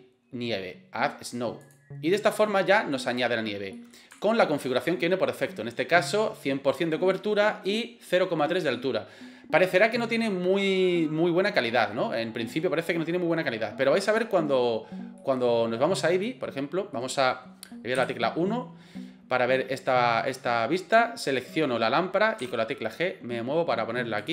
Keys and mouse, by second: 1.7-2.1 drag, 2.7 middle click, 3.8 middle click, 4.2-4.5 shift+middle drag, 8.7-11.4 middle drag, 15.2-16.0 middle drag, 16.2-16.9 middle drag, 18.0 KP_1, 21.3 right click, 22.4 g.